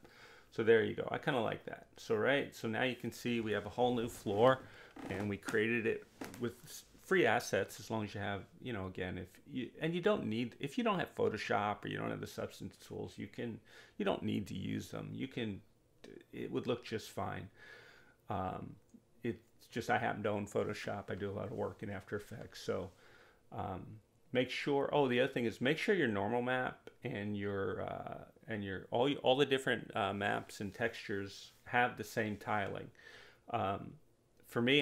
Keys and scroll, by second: 19.4 4, 21.3 8, 21.6 Return, 31.4 2, 33.0 4, 33.4 Return.